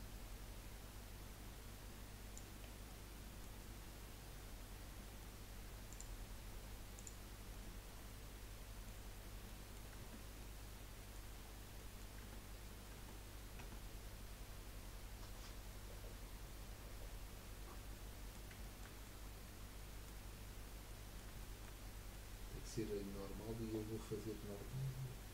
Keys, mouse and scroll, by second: 2.6-3.0 scroll down 3, 3.0-4.6 middle drag, 4.6-5.0 scroll down 2, 5.0-5.9 middle drag, 5.9 click, 6.4 scroll up 1, 6.9 click, 7.5-9.1 middle drag, 9.1-9.6 scroll up 4, 9.6 middle click, 10.2 Tab, 10.5-11.6 middle drag, 11.6 scroll down 2, 11.8 middle click, 12.2 Tab, 13.0 Tab, 13.6 Tab, 14.9-17.2 middle drag, 18.6 shift+middle click, 19.0 middle click, 20.2-20.8 scroll up 2, 20.8-21.8 middle drag, 21.8 scroll up 3, 22.1-25.2 middle drag.